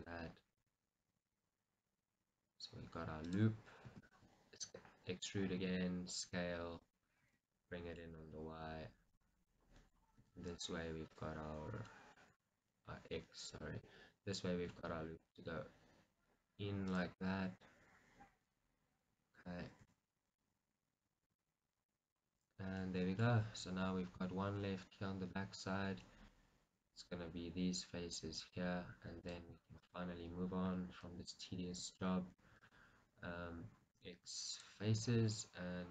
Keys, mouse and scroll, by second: 0.1 click, 0.6 s, 3.4 click, 4.0 e, 4.2 right click, 5.7 s, 7.0 click, 7.3 g, 9.2 click, 9.6-11.2 middle drag, 10.3 s, 11.2 click, 12.0-13.6 middle drag, 12.4 g, 13.6 click, 14.0-16.2 middle drag, 14.7 g, 17.1 click, 17.3-18.6 middle drag, 18.7-19.9 middle drag, 19.9 g, 21.5 click, 21.8 scroll, 22.1-25.5 middle drag, 22.5-23.0 scroll, 26.2-28.5 middle drag, 28.5 click, 29.3 click, 31.2 i, 34.0 x, 35.1-35.9 scroll up 1.